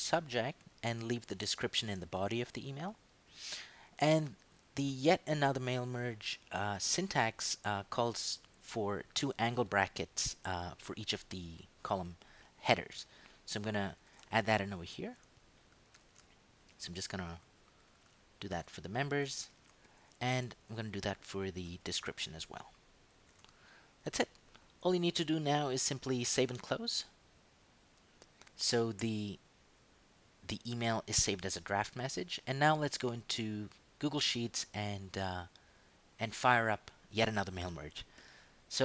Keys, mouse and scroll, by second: 1.0 click, 1.6 ctrl+shift+Left, 2.1 ctrl+shift+BackSpace, 4.2 click, 13.9 shift+,, 14.9 ctrl+Right, 15.9 shift+., 16.6 shift+Right, 17.8 shift+,, 18.6 End, 19.4 shift+., 20.3 Tab, 21.4 shift+,, 22.1 shift+End, 23.1 shift+., 27.7 click, 33.6 click, 35.4 click.